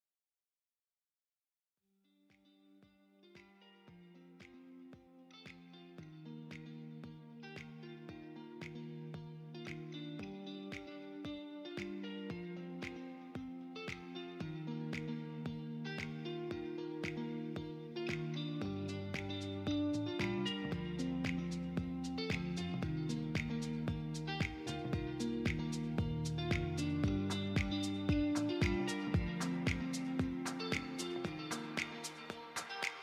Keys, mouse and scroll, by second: 0.6 KP_7, 2.5 r, 2.9 z, 7.4 click, 8.5 shift+d, 8.8 r, 9.2 z, 16.4 click, 17.6-19.0 typing, 20.1 click, 20.8 KP_3, 22.4 shift+d, 22.9 z, 23.7 click, 24.4 s, 25.3 click, 26.8 click, 27.7 KP_7, 28.8 s, 29.1 x, 30.0 click, 30.5 KP_7, 32.8-33.0 middle drag.